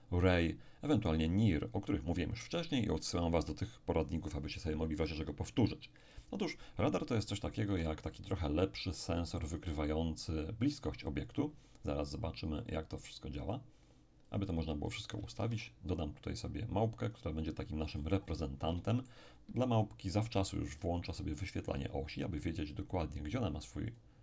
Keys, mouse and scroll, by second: 7.7 x, 8.0 click, 9.5 click, 11.3 click, 12.6 click, 14.3 click, 15.4 shift+a, 17.0 click, 17.9-18.8 scroll up 2, 18.8-20.0 shift+middle drag, 20.1 shift+click, 20.7-22.9 scroll down 2, 23.9 click.